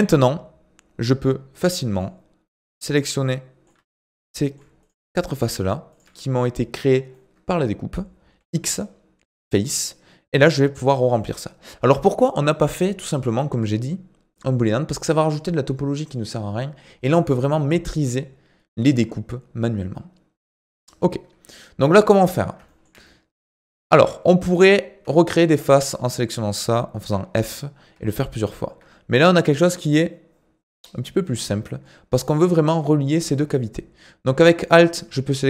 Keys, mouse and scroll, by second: 1.9 click, 2.5 click, 3.2 middle click, 3.9 shift+click, 4.2 middle click, 4.8 shift+click, 5.1 middle click, 5.9 shift+click, 7.1-8.4 middle drag, 8.4 x, 9.8-14.3 middle drag, 17.2-18.8 scroll up 1, 18.8-21.0 middle drag, 21.0-22.2 scroll up 1, 22.2 click, 22.7 shift+middle click, 23.3-23.7 scroll up 4, 23.7 shift+middle click, 24.5 click, 25.4 shift+click, 25.7-27.0 middle drag, 27.0 f, 28.5 ctrl+z, 31.4-34.6 middle drag, 34.6 alt+click.